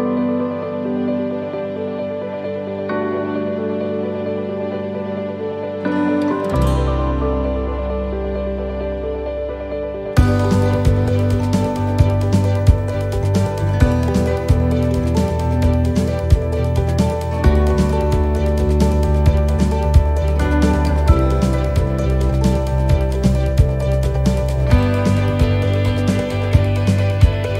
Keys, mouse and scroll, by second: 0.1 middle click, 2.1 middle click, 2.6 alt+shift+right click, 3.1 middle click, 4.6 alt+shift+right click, 6.1-10.0 alt+shift+right click, 10.1 middle click, 11.4 shift+middle click, 12.4 alt+shift+right click, 12.8 middle click, 14.4 alt+shift+right click, 15.3 alt+shift+right click, 15.8 alt+shift+right click, 17.0 alt+shift+right click, 17.2 middle click, 18.7 alt+shift+right click, 19.5 middle click, 20.8 alt+shift+right click, 21.4 shift+middle click, 22.7 alt+shift+right click, 23.4 alt+shift+right click, 23.5 middle click, 24.7 alt+shift+right click, 26.1 alt+shift+right click, 26.2 middle click.